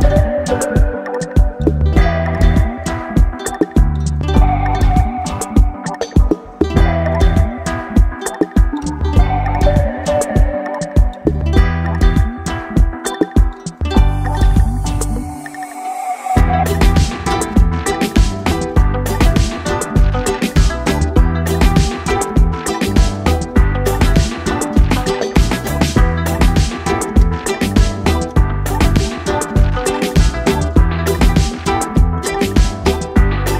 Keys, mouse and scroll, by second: 0.1-2.8 scroll up 5, 2.8 click, 5.7-11.8 drag, 11.8 BackSpace, 21.6 click, 23.1-28.2 drag, 32.2-33.5 drag.